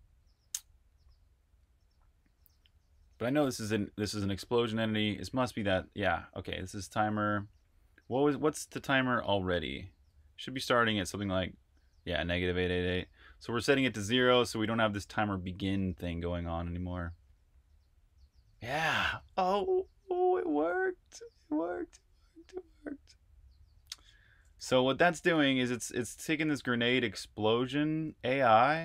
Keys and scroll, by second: 19.2 super+q, 20.4 super+Tab, 24.4 super+j, 26.3 super+j, 26.9 super+j, 27.4 super+j.